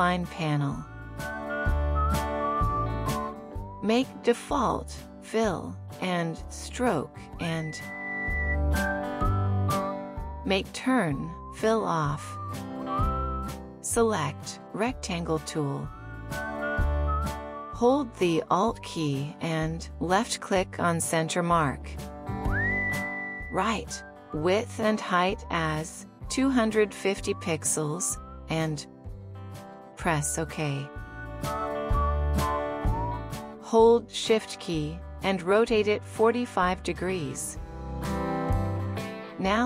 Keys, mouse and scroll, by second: 14.2 right click, 23.1 alt+click, 34.7 shift+click.